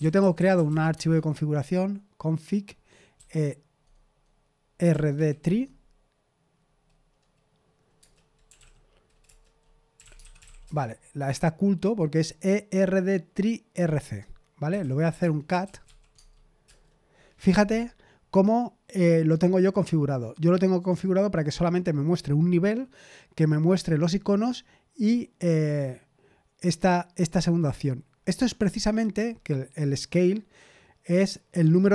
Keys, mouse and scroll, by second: 0.0-1.1 typing, 3.1 typing, 4.9 typing, 5.4 Tab, 7.9 Return, 8.2-10.9 typing, 9.2 Return, 14.5-16.3 typing, 16.6 Return.